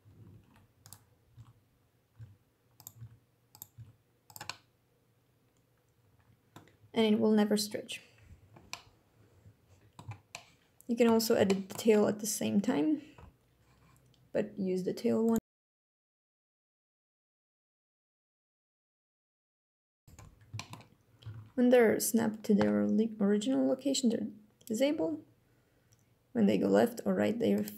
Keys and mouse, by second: 0.6 click, 0.8-1.2 drag, 1.6 click, 2.2 g, 4.3 click, 5.2 click, 6.2 click, 6.5 g, 7.2 click, 8.6-12.0 typing, 9.1 click, 11.1 click, 11.8 click, 12.6 drag, 12.8-13.3 middle drag, 13.3-14.9 drag, 15.3 alt+g, 15.3 r, 15.4 shift+drag, 16.1 shift+click, 16.8 shift+drag, 17.7 click, 18.3 shift+click, 18.8 shift+click, 19.6 click, 19.6 g, 20.4 click, 21.0 alt+g, 24.6 g, 27.2 click.